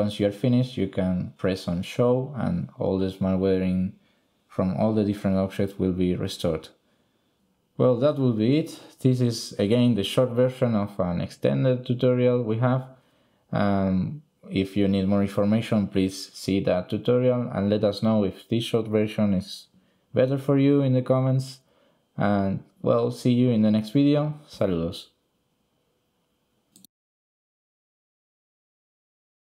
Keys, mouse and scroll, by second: 5.7 shift+click, 6.8 click, 8.3 middle click.